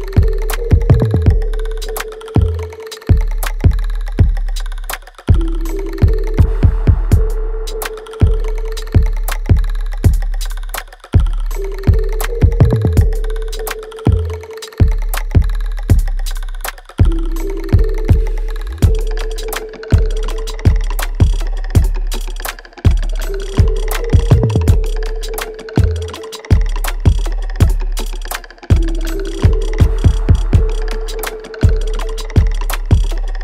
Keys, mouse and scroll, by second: 0.8 ctrl+z, 1.7-13.4 ctrl+drag, 20.4 click, 20.8 alt+right click, 21.8 click, 23.0-25.2 alt+right drag, 25.2-30.1 ctrl+drag, 30.1 alt+right click, 30.7 alt+click.